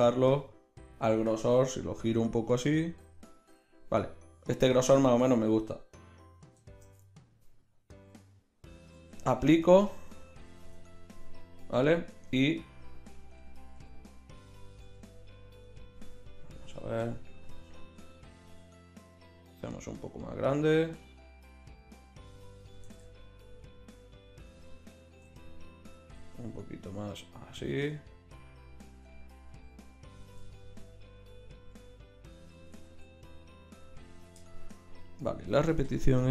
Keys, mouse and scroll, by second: 1.7 r, 7.5-9.0 middle drag, 9.0 ctrl+a, 9.9 click, 10.2 click, 12.1 Tab, 13.4 a, 13.8 a, 14.8 s, 18.1 s, 22.9 g, 24.5 click, 25.3 g, 28.9 s, 30.2 g, 31.7 s, 32.7 g.